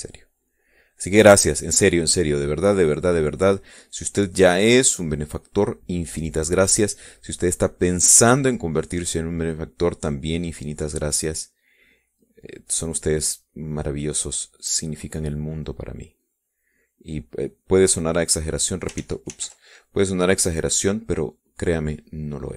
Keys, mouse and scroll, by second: 5.0 click, 11.0-19.1 drag, 19.6 click, 20.3 ctrl+z.